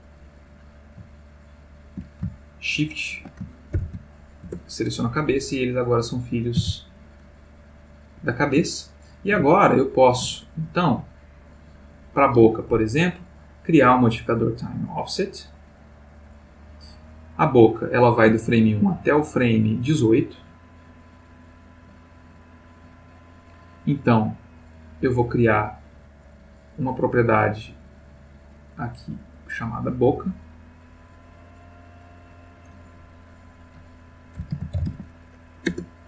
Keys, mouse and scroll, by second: 1.2 shift+click, 2.5 shift+click, 3.7 ctrl+p, 4.4 Return, 5.6 click, 6.6 r, 8.2 Escape, 8.7-10.3 ctrl+middle drag, 11.4 click, 13.4 click, 16.1 click, 19.1 click, 20.0-21.7 drag, 22.4 click, 24.4 click, 26.6 click, 27.2 middle click, 29.5 click, 30.7 middle click, 32.3 click, 33.5 click, 34.5 shift+b, 34.7 shift+o, 34.8 shift+c, 34.9 shift+a, 35.7 Return.